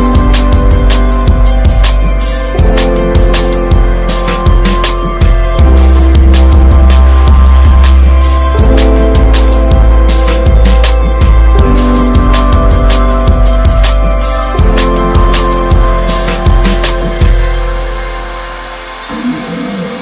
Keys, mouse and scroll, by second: 2.2 alt+middle click, 2.7 alt+z, 4.1 1, 4.4 click, 6.3 click, 8.0-9.1 middle drag, 9.1 3, 9.4 click, 10.4 3, 10.8-11.9 drag, 11.9 ctrl+s, 12.2-13.8 scroll up 1, 14.5 scroll up 1, 14.7-15.6 scroll down 2, 15.6 scroll up 1, 15.9 middle click, 16.5 r, 17.5 alt+middle click, 19.5 ctrl+s, 19.8 scroll up 2.